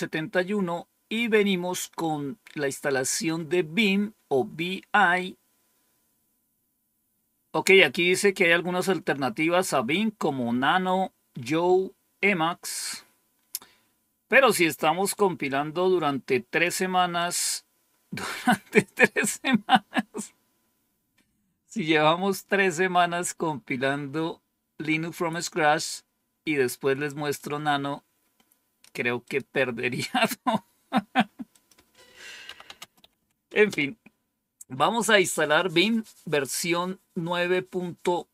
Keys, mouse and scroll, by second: 1.0 click, 15.3-16.5 drag, 17.1 click, 27.2-28.8 drag, 29.1 click, 31.4 click, 32.1-33.6 typing.